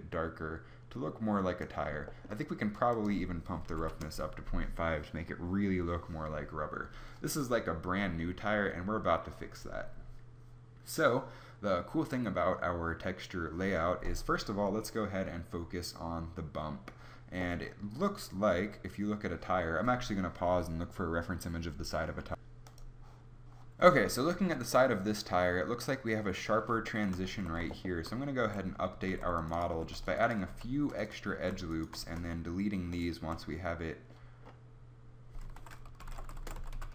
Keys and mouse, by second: 27.4 Tab, 28.5 a, 29.0 ctrl+r, 29.8 ctrl+r, 30.5 ctrl+r, 31.4 a, 32.1 space.